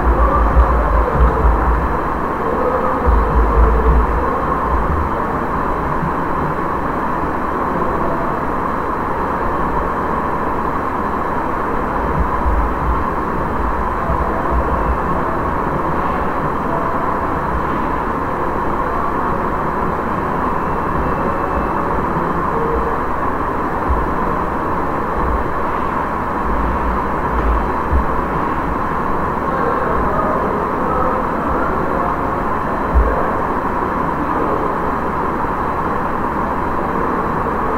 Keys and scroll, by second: 0.0-2.2 typing, 3.5-4.4 typing, 12.7 shift+h, 14.6 Left, 26.3 l, 26.6 o, 27.2 space.